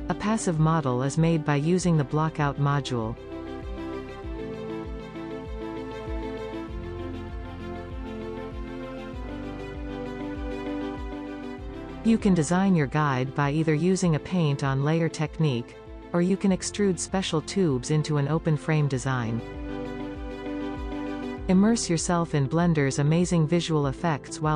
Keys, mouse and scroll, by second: 0.0 scroll up 2, 0.2 click, 0.6 right click, 0.6 click, 0.8-1.8 right drag, 1.9-2.4 drag, 2.8-3.7 scroll down 8, 4.3 scroll down 1, 5.2 click, 7.0 middle click, 8.4 click, 9.2-9.7 middle drag, 10.3 click, 10.6 middle click, 11.5-12.5 drag, 14.2-15.3 middle drag, 15.3 click, 15.7 middle click, 16.4 click, 16.8 middle click, 16.9 scroll up 1, 17.0 shift+middle click, 17.2-19.6 drag, 19.7-21.8 middle drag, 21.8-22.6 scroll up 1, 22.6-24.5 drag.